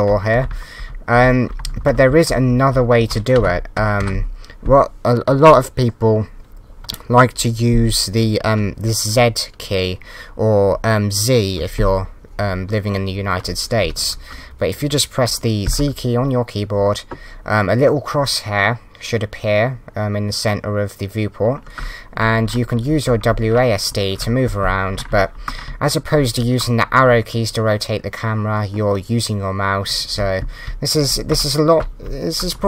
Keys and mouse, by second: 0.3 Up, 1.6 Down, 1.7 Left, 1.8 Left, 2.9 Right, 3.3 Down, 4.0 Up.